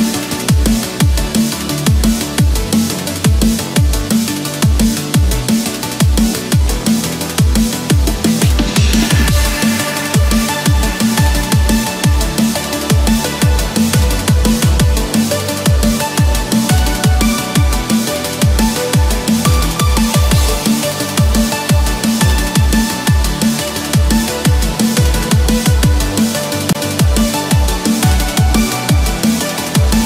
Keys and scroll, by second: 0.9 Return, 1.6 Escape, 4.4 Return, 4.9 Escape, 5.7 ctrl+-, 6.0 ctrl+0, 7.2 ctrl+=, 7.7 ctrl+space, 11.8 Return, 12.3 Escape, 15.7 Return, 16.3 Escape, 17.9 ctrl+-, 22.1 Return, 22.6 Escape, 23.3 ctrl+-, 25.8 ctrl+=, 26.4 ctrl+=.